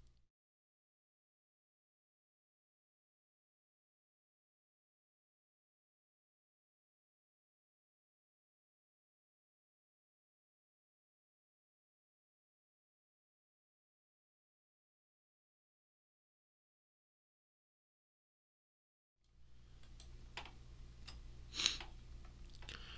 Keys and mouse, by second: 0.5 click, 1.5 click, 1.7 middle click, 2.3 s, 2.9 click, 4.5 click, 5.9 click, 6.3 click, 7.1 alt+click, 7.5-11.1 typing, 7.6 click, 9.8 click, 10.2 click, 11.2 click, 12.2 KP_0, 12.6 right click, 12.7 e, 12.9 click, 13.4 click, 13.5 middle click, 14.3 e, 14.4 click, 15.1 click, 15.3 alt+click, 15.9 click, 16.0 middle click, 16.5 alt+click, 17.2 alt+right click, 17.5 click, 19.0 alt+click, 19.3 alt+right click.